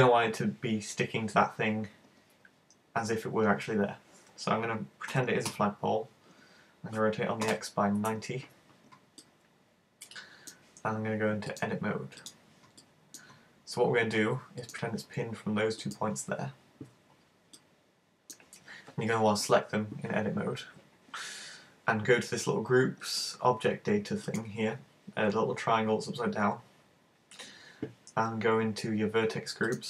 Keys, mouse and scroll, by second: 5.1 r, 9.2 middle click, 11.5 click, 12.3 click, 12.8 middle click, 14.7 right click, 14.9 right click, 15.8 shift+right click, 17.7 middle click, 24.3 click, 29.7 click.